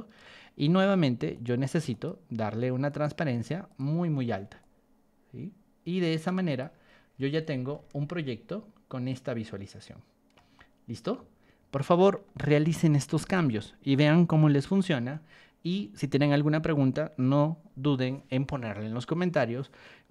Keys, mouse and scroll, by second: 1.3 click, 1.9 right click, 2.8 click, 3.6 click, 4.6 click, 6.5 click, 7.1 Escape, 7.7-10.4 shift+middle drag, 10.5-12.2 middle drag, 15.1 middle click.